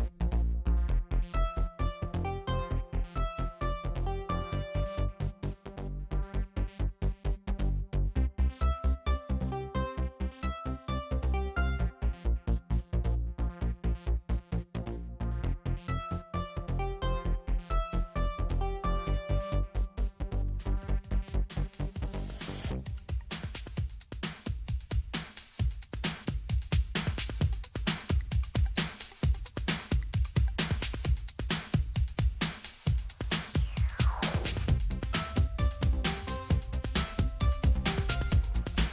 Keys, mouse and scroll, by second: 1.2 ctrl+z, 3.2 click, 5.3 click, 7.7 click, 8.8 click, 9.8 click, 12.1 click, 13.6 click, 17.6 click, 20.4 click, 21.8-23.4 drag, 24.8 click, 26.1 click, 27.7 click, 30.7 click.